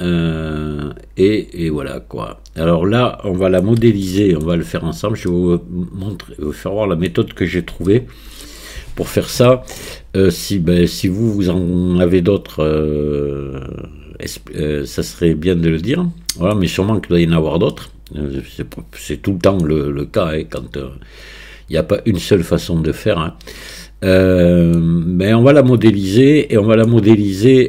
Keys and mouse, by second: 3.6 middle click, 4.1 shift+middle click, 5.3-6.9 middle drag, 7.1 middle click, 7.9 shift+middle click, 9.5-10.5 middle drag, 11.1-14.5 middle drag, 14.7-16.3 middle drag, 16.3 middle click, 17.8-18.3 middle drag, 18.8-19.7 middle drag, 20.7-24.8 middle drag, 26.2-26.9 middle drag.